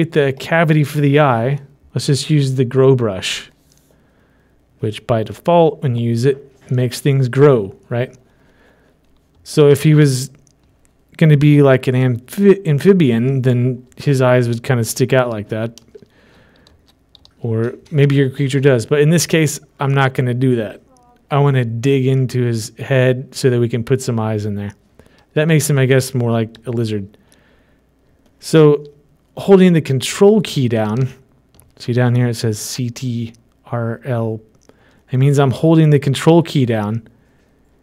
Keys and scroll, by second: 14.1 typing, 15.9-18.3 typing.